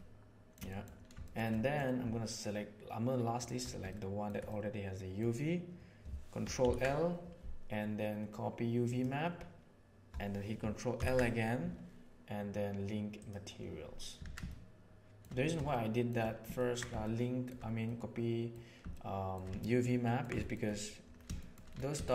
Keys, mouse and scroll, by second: 0.6 middle click, 1.2 shift+middle click, 1.4 middle click, 3.3 shift+click, 3.9-4.2 ctrl+middle drag, 4.5 middle click, 6.5 ctrl+l, 10.9 ctrl+l, 14.2 alt+a, 14.4-15.2 shift+middle drag, 15.6-16.0 shift+middle drag, 16.5 ctrl+middle click, 17.0-17.4 shift+middle drag, 17.8-18.4 middle drag, 18.8-19.3 shift+middle drag, 19.5 ctrl+middle drag, 20.0 ctrl+middle drag, 20.3 shift+middle click, 20.6 middle drag, 21.3 shift+middle drag, 22.0 shift+middle click.